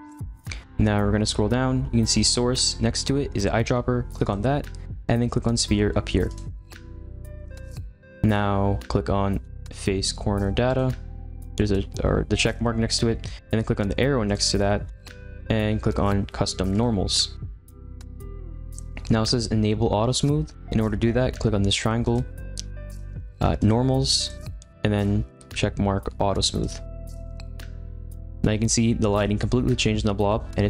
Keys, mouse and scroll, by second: 0.6-4.2 scroll down 8, 4.2 click, 8.2 scroll down 4, 11.9 click, 14.2-14.6 drag, 14.6-15.6 scroll down 6, 18.0 click, 22.0 click, 23.5-26.1 drag, 27.9 click, 30.3-30.6 middle drag.